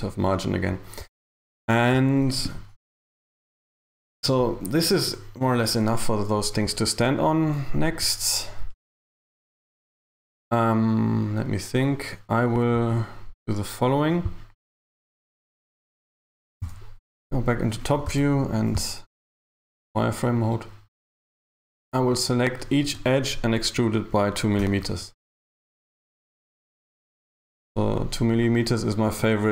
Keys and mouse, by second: 14.3 click, 15.4 shift+s, 16.7 KP_7, 18.1 z, 21.1 right click, 24.7 e, 25.8 g, 28.4 right click, 29.4 shift+right click.